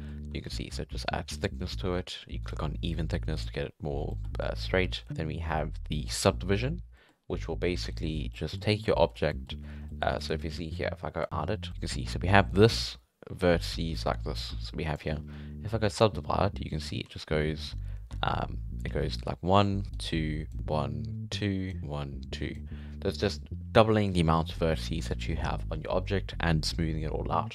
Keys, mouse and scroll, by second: 0.4 alt+a, 0.5-2.4 middle drag, 2.4 click, 2.9-3.4 middle drag, 3.4 right click, 4.1 middle click, 4.3 alt+a, 4.9 scroll down 4, 5.6-6.1 drag, 6.1-6.4 middle drag, 6.4-7.0 scroll down 3, 7.0-7.9 middle drag, 7.9 click, 8.3-9.1 middle drag, 9.1 scroll up 4, 9.3-10.2 middle drag, 10.2 right click, 11.2 click, 11.7 middle click, 12.0 d, 12.5-14.9 drag, 14.9 d, 15.0 d, 15.9 click, 17.0 d, 18.1 Tab, 18.8 d, 19.1 click, 19.8 d, 19.9 click, 20.5 d, 21.8 click, 22.5-22.8 d.